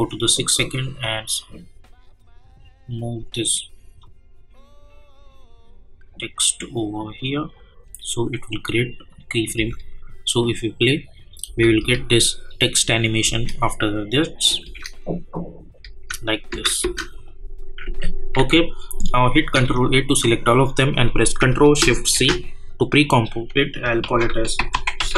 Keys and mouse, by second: 9.5 space, 14.1 click, 14.6 space, 17.1 click, 17.8 u, 18.3 u, 19.5 ctrl+a, 22.2 ctrl+shift+c, 23.8-25.1 typing.